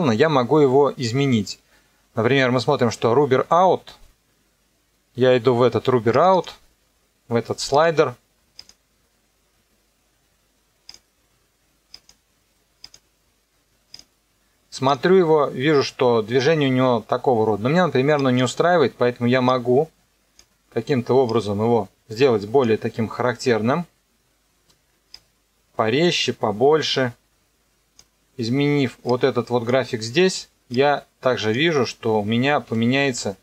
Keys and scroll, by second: 32.6 KP_0.